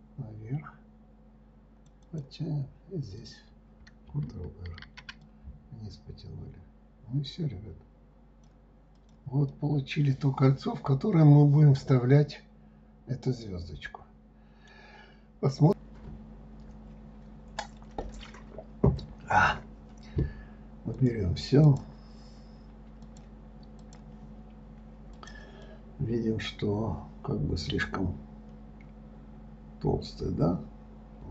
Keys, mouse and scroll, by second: 3.6 click, 5.2 ctrl+r, 9.9-12.9 middle drag, 21.4 click, 22.0 click, 23.4 click, 24.2 click, 25.0 scroll down 1, 25.6 click, 26.0-29.1 middle drag.